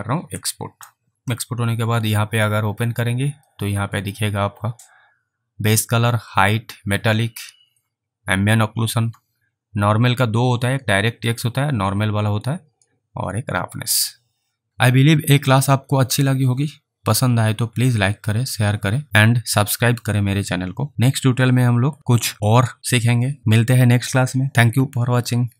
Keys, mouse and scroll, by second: 0.3 click, 0.5 click, 1.1 click, 2.2 click.